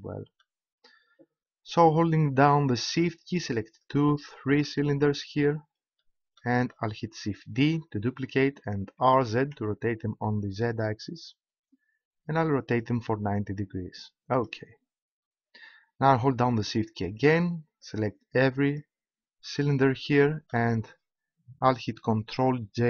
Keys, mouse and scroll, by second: 0.5 click, 7.5 shift+d, 14.5-16.5 drag, 17.8-21.9 right drag, 20.1 click.